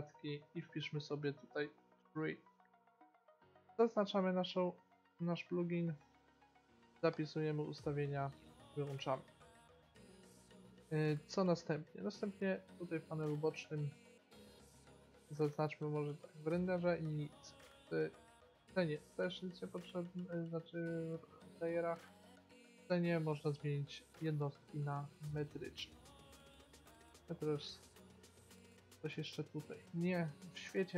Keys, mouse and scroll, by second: 9.1-13.2 middle drag, 14.0-16.0 drag, 17.3-19.2 drag, 22.6 click, 24.4-26.2 drag, 28.4-30.3 middle drag, 30.7-30.9 drag.